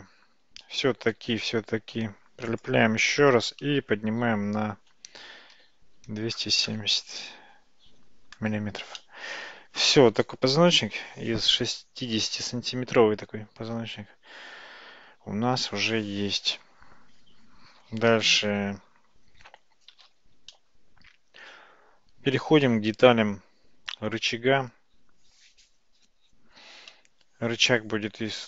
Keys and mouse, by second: 1.1 g, 3.5 g, 9.1-15.1 middle drag, 18.7 Tab, 18.7 `, 19.2 Tab, 20.1 alt+z, 20.6-22.4 middle drag.